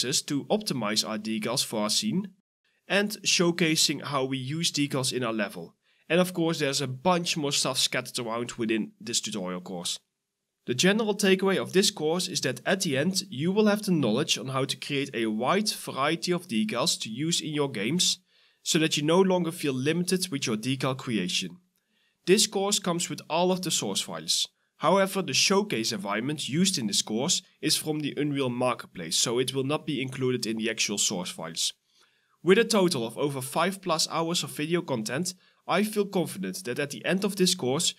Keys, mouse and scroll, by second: 0.0-0.5 typing, 1.4 shift+click, 1.6 right click, 2.2 double click, 2.5 ctrl+d, 2.8 right click, 2.9-4.7 typing, 6.5-8.3 typing, 7.1 scroll up 1, 8.0 right click, 9.3 right click, 9.4 w, 10.5-11.7 typing, 10.7 right click, 11.6 right click, 13.4-14.2 typing, 13.6 right click, 26.4 ctrl+v, 28.1-31.9 typing, 28.3 right click, 28.6 scroll up 1, 29.6 scroll down 1, 32.2 double click, 34.6 right click, 34.7 s, 35.1 right click, 35.2 a, 35.3 scroll up 1, 36.1 Delete, 36.7 right click, 36.9 d, 37.6 right click, 37.6 w.